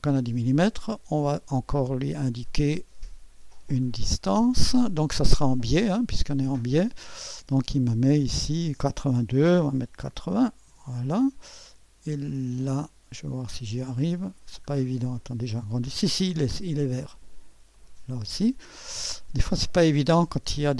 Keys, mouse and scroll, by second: 2.2 click, 4.1 click, 5.8 click, 9.6-11.2 typing, 13.7 click, 14.6-15.2 scroll up 1, 15.2 middle click, 15.2-15.6 scroll up 1, 17.7-18.8 drag.